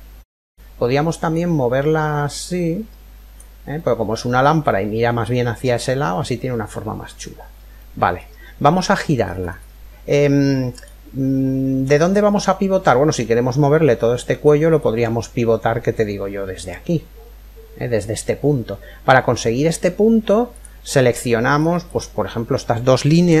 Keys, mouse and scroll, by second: 0.9 click, 3.4-6.2 middle drag, 7.0-7.4 scroll down 1, 7.4-11.4 middle drag, 11.4-12.6 scroll down 1, 12.6-13.0 scroll down 1, 21.6 click, 21.6 right click, 21.8 click, 21.8-23.4 right drag.